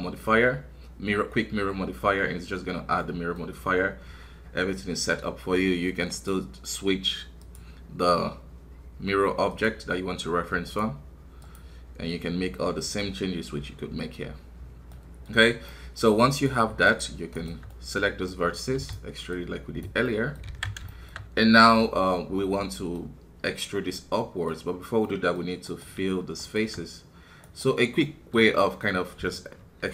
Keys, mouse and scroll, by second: 1.4-3.0 drag, 3.0-6.1 middle drag, 6.1-13.6 drag, 14.9 middle click, 15.3 scroll up 2, 15.7-17.3 middle drag, 17.3 shift+right click, 17.7-18.7 middle drag, 18.7 e, 19.3-20.5 drag, 20.5 alt+a, 20.8 shift+middle click, 21.1 scroll up 1, 21.9-25.6 middle drag, 25.6-28.1 right drag, 28.1-29.8 middle drag, 29.8 f.